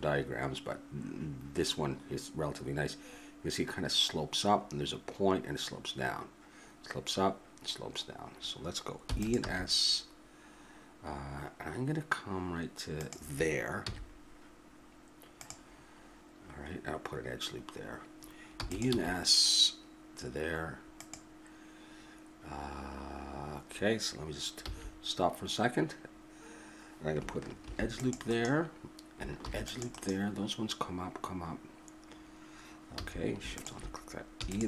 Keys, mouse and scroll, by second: 9.0 e, 9.5 s, 13.9 z, 18.5 e, 19.0 s, 24.6 a, 27.6 ctrl+r, 29.5 ctrl+r, 33.0 a, 34.4 e.